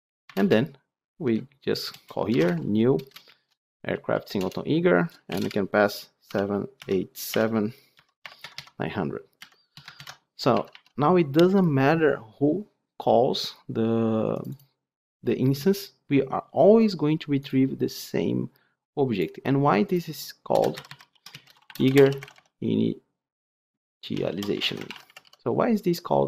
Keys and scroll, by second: 4.4 Return, 9.9 ctrl+alt+l, 10.4 alt+1.